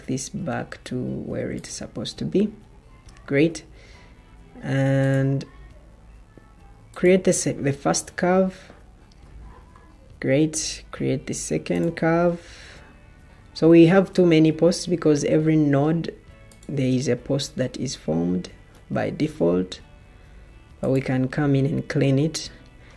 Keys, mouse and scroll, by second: 19.0 Escape.